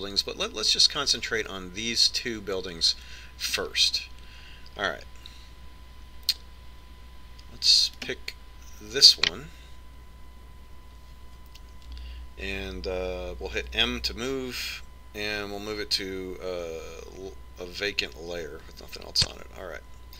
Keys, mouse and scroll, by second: 9.4 right click, 14.8 m.